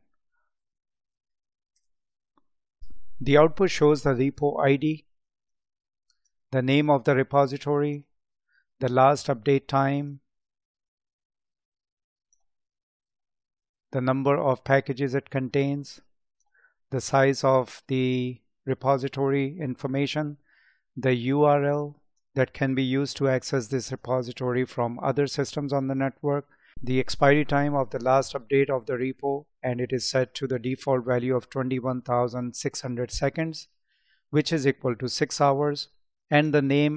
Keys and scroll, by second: 0.7 space.